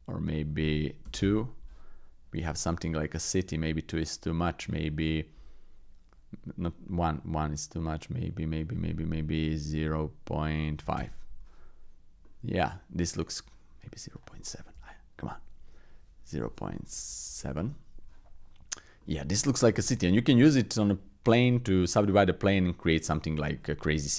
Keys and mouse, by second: 0.3-1.3 drag, 2.4 shift+middle click, 4.9-11.1 drag, 12.2-13.3 middle drag, 14.3-17.7 drag, 19.0 middle click, 21.5-21.9 middle drag, 22.5 middle drag, 23.5 shift+middle click, 23.9 middle click.